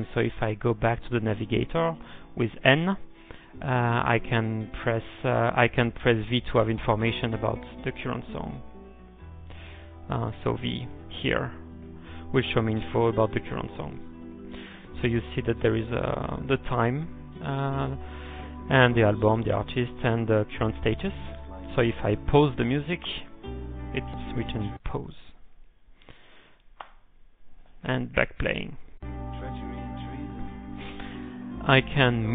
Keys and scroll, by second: 1.8-2.5 typing, 3.5 ctrl+n, 7.4-8.2 typing, 9.3 ctrl+x, 9.7 k, 10.6 ctrl+x, 10.9 shift+o, 12.0-12.8 typing, 24.3-25.1 typing, 27.8-28.6 typing.